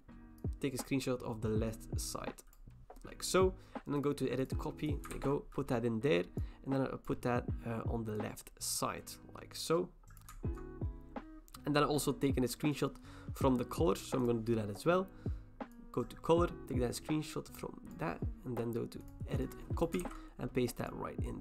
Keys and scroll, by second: 5.1 ctrl+v, 20.0 ctrl+v.